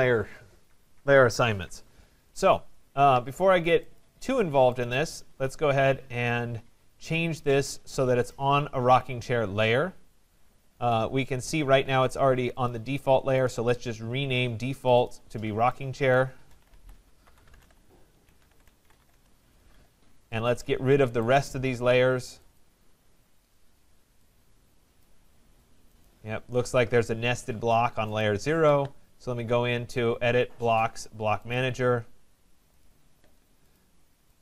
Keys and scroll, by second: 19.1 Return.